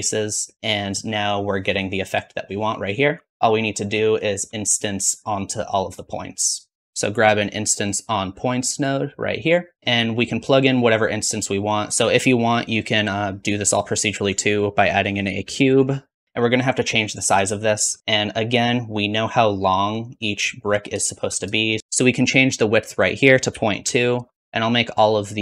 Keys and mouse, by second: 2.3-6.8 drag, 3.1 shift+z, 6.8-8.4 middle drag, 6.8 shift+a, 11.1-16.2 drag, 21.8 middle click.